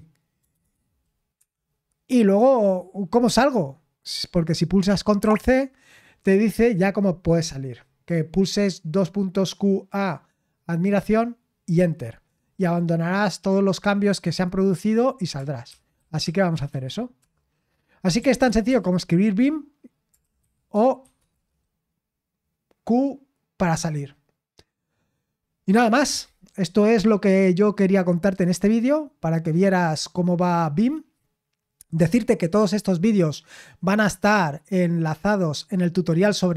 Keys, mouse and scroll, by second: 0.4 BackSpace, 0.6 BackSpace, 1.3 Escape, 5.2 ctrl+c, 15.4-18.9 typing, 19.9-21.3 typing.